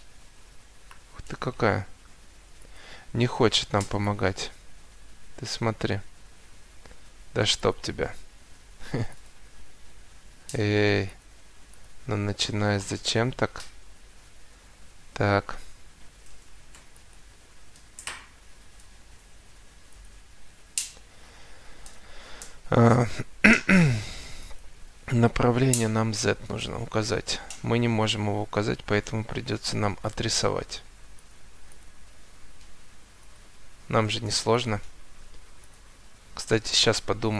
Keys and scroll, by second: 28.0 Escape, 30.5 Escape, 34.7 Escape.